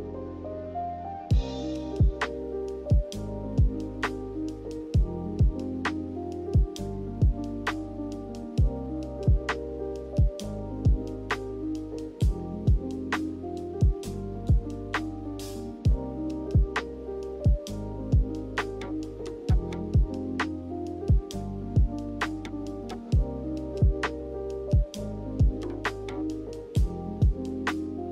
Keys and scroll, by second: 2.1 a, 6.3 ctrl+h, 7.7-8.6 typing, 10.0 ctrl+h, 16.4 n, 26.1 g, 27.7 z.